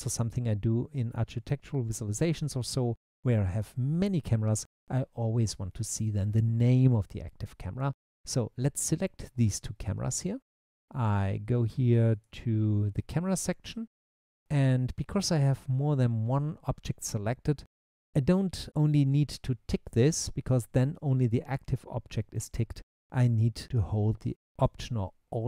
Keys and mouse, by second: 10.2 click, 12.2 click.